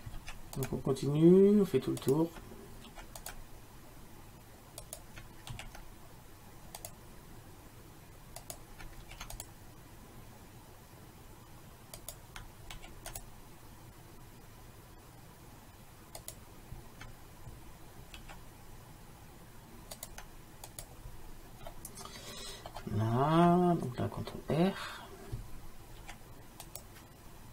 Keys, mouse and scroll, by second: 0.2 ctrl+r, 2.9 ctrl+r, 5.6 ctrl+r, 9.1 ctrl+r, 12.8 ctrl+r, 18.3 ctrl+r, 21.8 middle click, 26.1 ctrl+r.